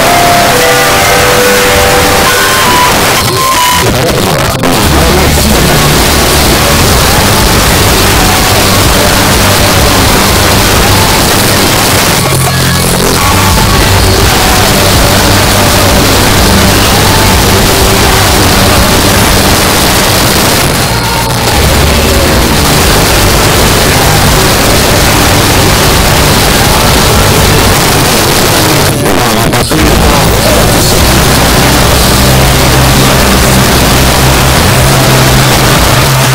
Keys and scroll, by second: 2.9 Page_Down, 11.2 Page_Down, 19.5 Page_Down, 27.7 Page_Down, 36.0 Page_Down.